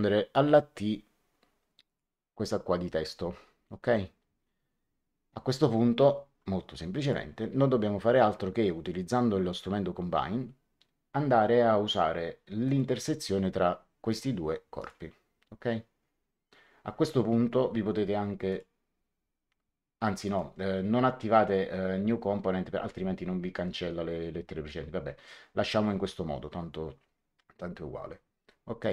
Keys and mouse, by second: 1.8 click, 6.9 click, 12.6 click, 14.0 click, 18.4 click, 20.1 click, 28.7 click.